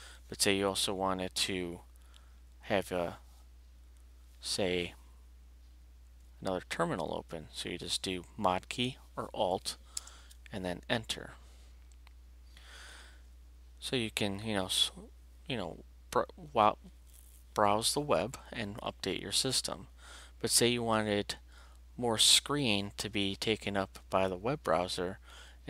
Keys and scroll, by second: 9.9 Return.